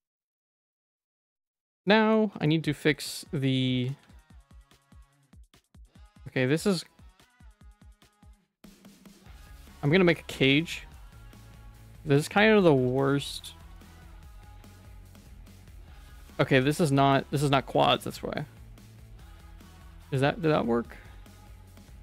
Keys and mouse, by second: 1.1 middle click, 1.4 middle click, 1.9 shift+middle click, 2.3 Tab, 2.5 middle click, 3.4 middle click, 4.0 ctrl+s, 4.2 middle click, 4.8 ctrl+r, 8.4 Tab, 8.5 middle click, 9.1 Tab, 9.3 middle click, 9.7 middle click, 10.0 middle click, 10.4 ctrl+s, 10.5 middle click, 11.1 shift+middle click, 11.6 middle click, 12.1 shift+middle click, 12.6 middle click, 13.8 shift+middle click, 14.3 2, 14.5 click, 15.1 click, 16.0 a, 16.5 3, 16.6 middle click, 16.8 shift+middle click, 18.1-19.5 drag, 21.8 middle click.